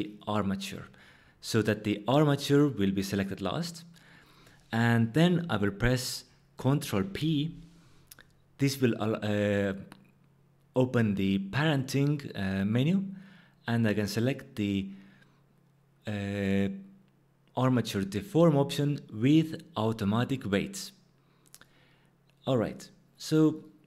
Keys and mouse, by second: 6.9 ctrl+p, 23.5 click.